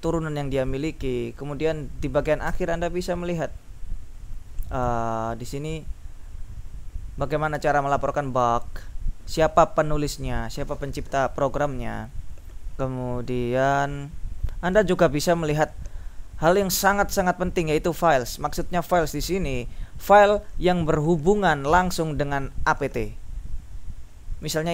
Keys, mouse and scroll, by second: 1.2 Down, 2.6 End, 3.7 Up, 4.7 Up, 5.1 Down, 5.4 Down, 11.6 Up, 13.1 Up, 14.4 Up, 15.2 Up, 16.5 Up, 17.6 Down, 18.4 Down.